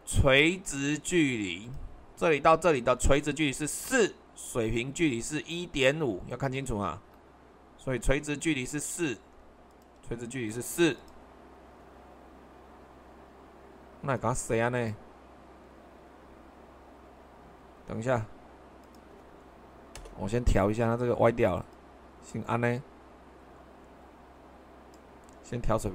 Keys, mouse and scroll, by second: 2.9 super+1, 6.9 super+2.